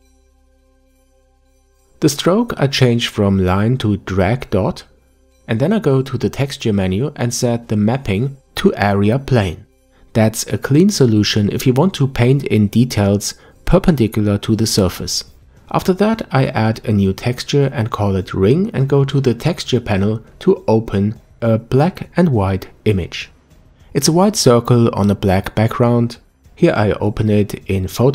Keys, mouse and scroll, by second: 18.9 click, 21.7 click, 27.9 middle click.